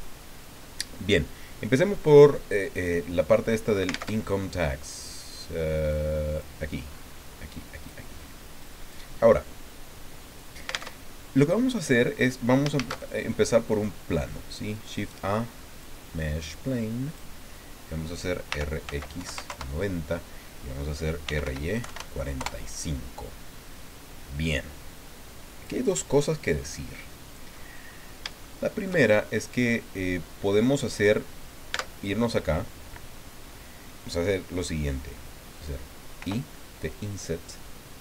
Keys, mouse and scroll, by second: 4.1 alt+Tab, 5.0-5.9 scroll down 2, 5.9 click, 6.9-7.4 scroll up 1, 7.5 click, 8.2 scroll up 1, 8.6 click, 10.9 alt+Tab, 12.8 shift+a, 13.7 click, 15.0-16.0 drag, 16.5 click, 18.5 r, 18.9 x, 19.2 KP_9, 19.4 KP_0, 19.5 KP_Enter, 21.0-21.9 typing, 22.4 KP_Enter, 24.5-25.8 drag, 26.6-27.7 drag, 27.8-28.2 scroll up 2, 28.4 shift+click, 29.4-31.1 drag, 31.7 Tab, 36.2 i.